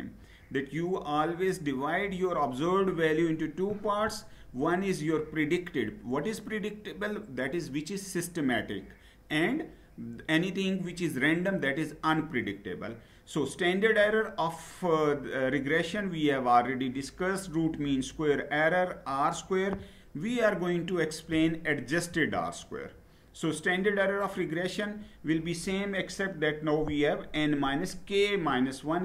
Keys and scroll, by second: 22.0 Down.